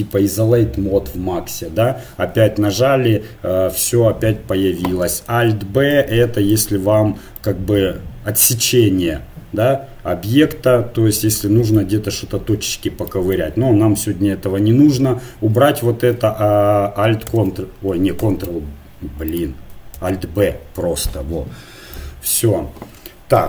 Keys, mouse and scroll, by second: 2.5 KP_Divide, 5.3 alt+b, 6.9-9.3 middle drag, 17.3 ctrl+alt+b, 18.2 ctrl+b, 19.9 alt+b.